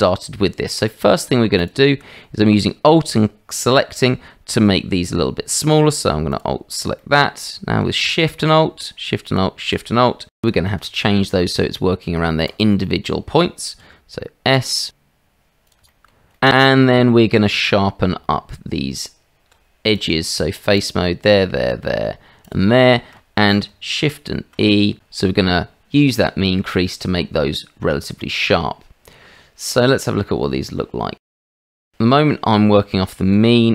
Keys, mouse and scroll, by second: 0.4 middle click, 1.6 alt+click, 7.0 alt+shift+click, 7.4 shift+click, 10.5-12.7 drag, 13.9 s, 16.0 shift+middle click, 16.4 middle click, 17.2 Tab, 22.9 shift+click, 24.2 shift+e, 26.8-29.7 middle drag, 30.4 shift+middle click, 31.4-32.4 shift+middle drag.